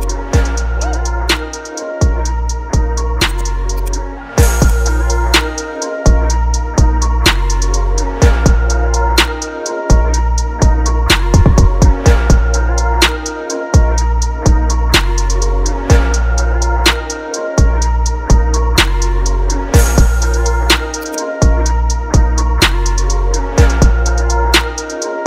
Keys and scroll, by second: 1.2 ctrl+j, 2.4 ctrl+t, 12.4 Up, 12.9 Right, 13.2 Up, 13.8 Left, 14.1 Up, 14.9 Left, 15.8 Return, 17.3 ctrl+t, 17.8 Up, 18.5 Right, 18.7 Up, 19.4 Return, 20.8 space.